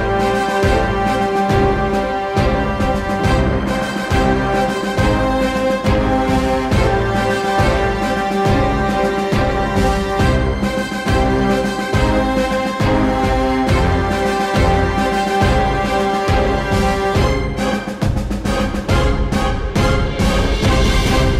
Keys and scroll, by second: 0.9 k, 17.4 k.